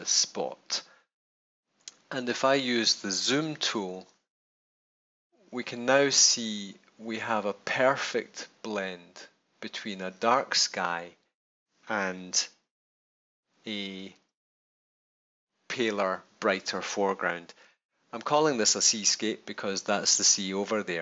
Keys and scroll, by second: 1.7 super+=, 12.2 super+-.